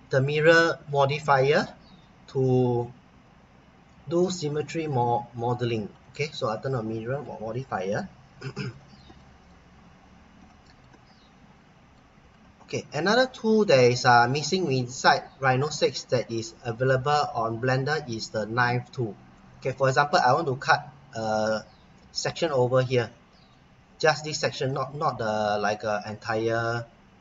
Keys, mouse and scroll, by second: 5.9 click, 6.7 middle click, 7.7-8.3 scroll up 1, 8.3 scroll down 1, 8.7 middle click, 10.0-10.3 scroll up 1, 10.5 middle click, 11.1 middle click, 12.3 middle click, 13.1 middle click, 15.7-17.8 scroll up 1, 18.9-19.2 scroll down 1, 19.3 middle click.